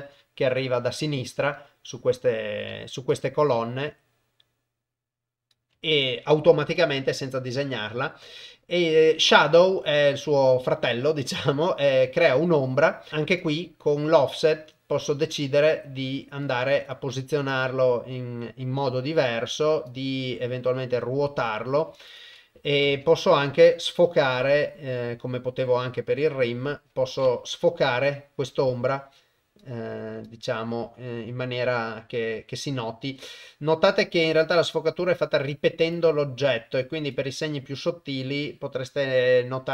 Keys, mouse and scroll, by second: 3.1-5.5 shift+drag, 6.8-10.5 drag, 13.4-16.4 shift+drag, 17.0-19.2 shift+drag, 19.9-21.8 drag, 22.1 click, 23.9 click, 27.7-29.6 shift+drag, 30.3-34.4 shift+drag, 35.9-37.1 shift+drag.